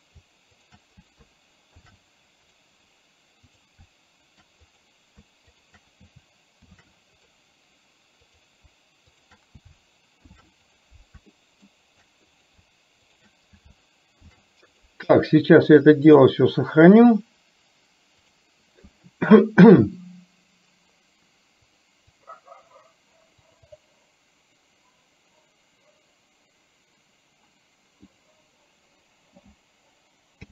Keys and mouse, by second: 0.7 shift+click, 3.6 click, 5.6 shift+click, 7.4 ctrl+shift+c, 9.2 click, 10.8 ctrl+shift+c, 11.4 middle click, 12.3 click, 13.2 click, 14.9 ctrl+shift+c, 16.3-18.7 drag.